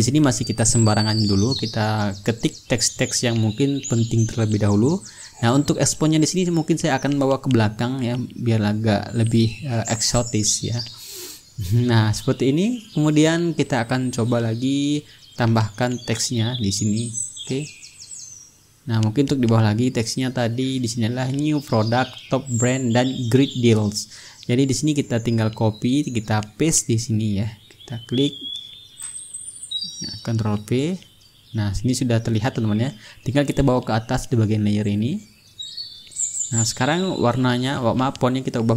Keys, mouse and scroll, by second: 3.0-5.4 drag, 5.6 click, 7.4 click, 8.8-10.9 ctrl+middle drag, 10.9-16.7 shift+drag, 15.7 t, 18.1 click, 18.9-20.3 middle drag, 20.6 click, 22.1-24.4 drag, 24.6 click, 25.7 click, 26.7-28.1 middle drag, 28.7 click, 29.5 click, 31.1 ctrl+v, 32.3 click, 32.8 ctrl+a, 34.3-37.1 drag, 37.6 click.